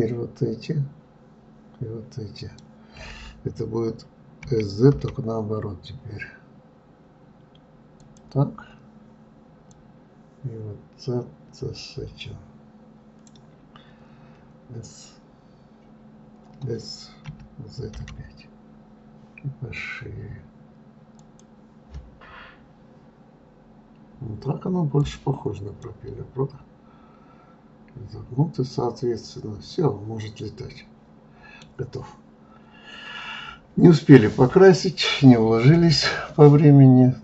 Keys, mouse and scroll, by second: 9.6-12.6 drag, 24.9 click, 25.7-28.7 middle drag.